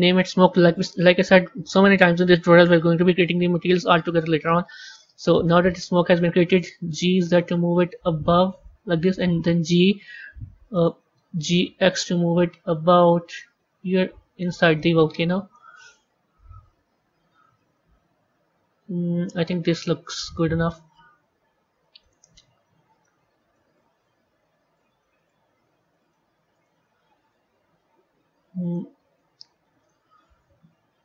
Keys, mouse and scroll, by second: 4.3-5.4 middle drag, 5.4-6.5 scroll down 3, 6.5 g, 9.4 g, 11.2 g, 14.6-16.1 middle drag, 16.1 KP_3, 18.1 g, 21.2 z, 22.9-25.0 middle drag, 25.0 click, 28.5 click.